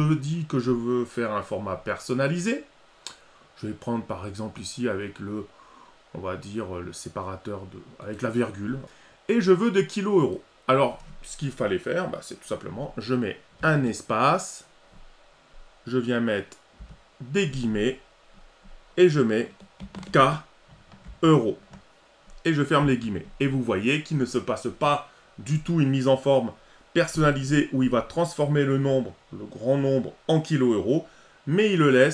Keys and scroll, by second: 21.1 ctrl+alt+e.